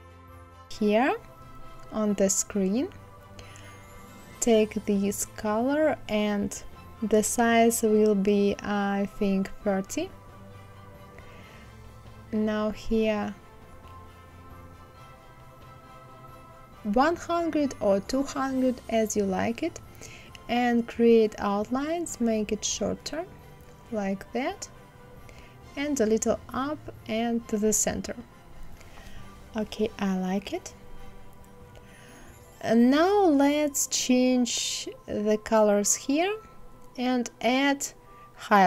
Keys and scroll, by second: 5.8 KP_5, 6.3 Return, 8.7 KP_3, 9.0 KP_0, 9.4 Return, 13.1 KP_1, 13.4 KP_0, 14.2 Return, 24.5 Up, 25.1 Left, 36.1 ctrl+c, 36.7 ctrl+v.